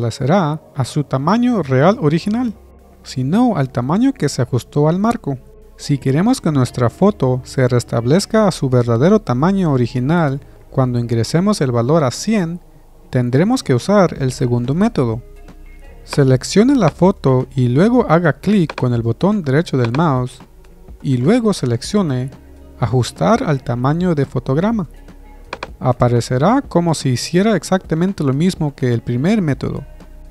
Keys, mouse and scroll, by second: 18.5-22.0 right drag.